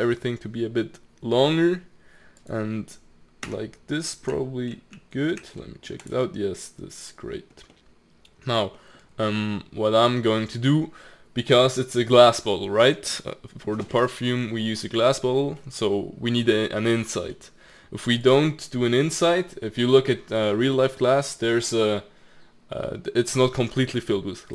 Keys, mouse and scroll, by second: 3.5 Tab, 3.9-4.3 middle drag, 4.3 t, 4.9 z, 5.6-6.0 middle drag, 6.0 click, 6.2-9.0 middle drag, 9.0-9.4 scroll down 2, 9.4-10.7 middle drag, 10.7-11.9 scroll up 1, 11.9-13.7 scroll up 1, 15.6-18.3 middle drag, 18.3 click.